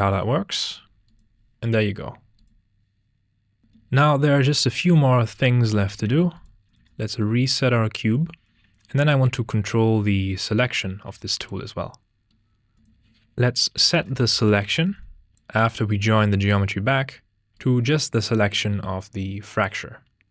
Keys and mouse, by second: 1.2 click, 2.4 click, 3.6 click, 5.8 a, 6.0 x, 6.7 shift+a, 8.3 x, 9.2-11.0 drag, 12.5 shift+a, 16.3 click, 17.5 click.